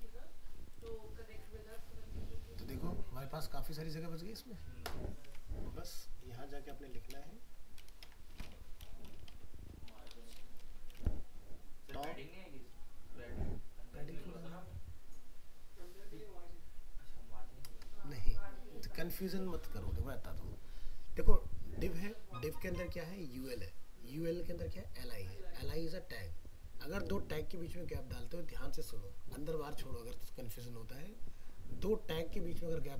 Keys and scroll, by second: 5.2 alt+Tab.